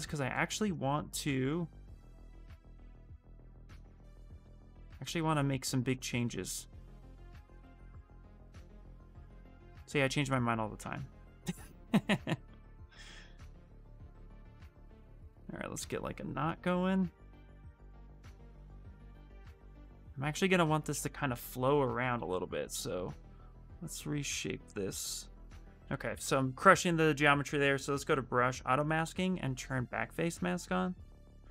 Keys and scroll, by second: 1.1 ctrl+z, 2.3 shift+f, 3.5 s, 4.9 space, 5.5 space, 6.5 s, 7.8 s, 10.9 ctrl+z, 21.5-22.4 typing, 25.5 ctrl+z.